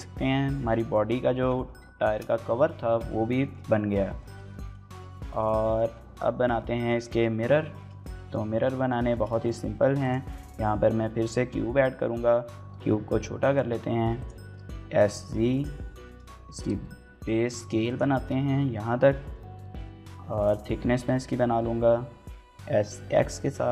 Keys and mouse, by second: 1.9 shift+middle click, 3.2 shift+middle click, 3.9 shift+middle drag, 4.1 middle drag, 4.7 shift+middle click, 7.6 middle click, 7.8-8.1 middle drag, 8.3 shift+middle click, 8.6 middle click, 8.8 shift+a, 10.1 middle drag, 10.9 KP_1, 11.3 KP_3, 12.5-14.0 typing, 12.8 click, 13.8 click, 13.9 shift+middle click, 14.2 click, 14.3 shift+middle click, 15.3 click, 15.8 shift+middle click, 16.3 s, 16.4 z, 17.7 click, 17.9 shift+middle click, 18.4 middle click, 19.3 KP_Decimal, 20.2 middle click, 20.6 s, 20.8 y, 21.6 x.